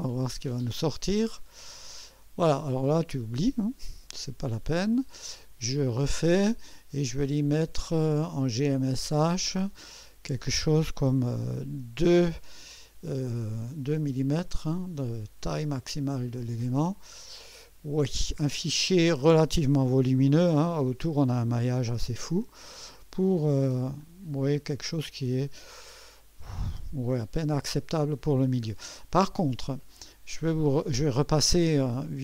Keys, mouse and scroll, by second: 1.4 click, 4.8 click, 6.0 click, 8.5 click, 9.9 click, 11.7 2, 16.7 click, 18.5 scroll up 2, 22.2 click, 24.0-26.5 drag, 27.3 scroll up 1, 31.6 click.